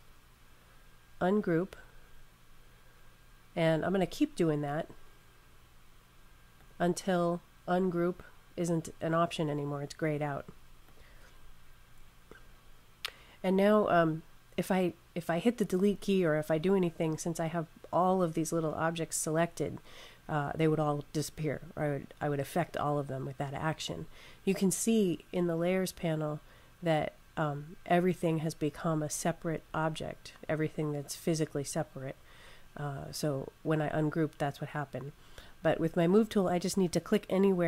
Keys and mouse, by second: 4.6 click, 10.7 click.